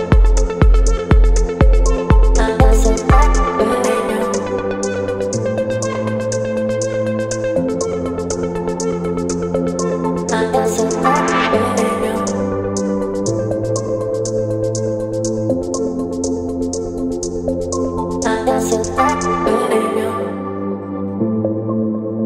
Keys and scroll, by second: 4.4 space, 19.6 ctrl+t.